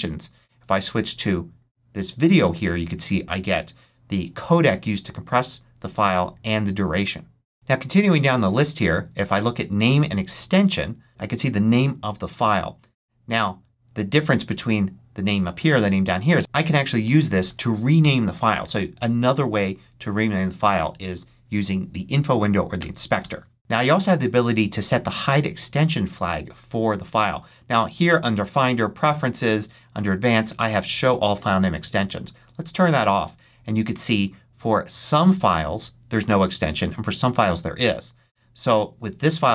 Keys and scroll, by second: 17.3 shift+x, 17.9 shift+Return, 18.5 Return, 22.7 BackSpace, 23.1 Return.